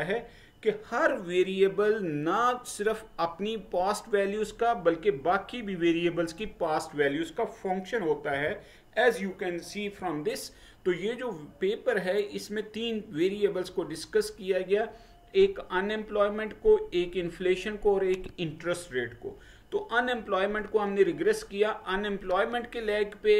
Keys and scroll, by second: 8.4 Right.